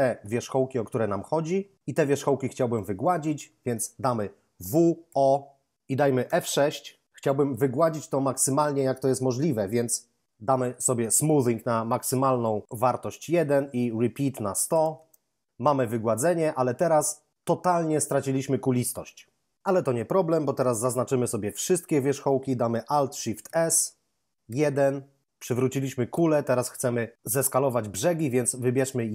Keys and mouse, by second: 4.6 w, 5.0 o, 6.2 F6, 10.2 F6, 11.2 click, 13.2 1, 13.7 Tab, 14.2 1, 14.5 0, 14.6 0, 20.8 a, 21.6 a, 23.4 alt+shift+s, 24.4 1.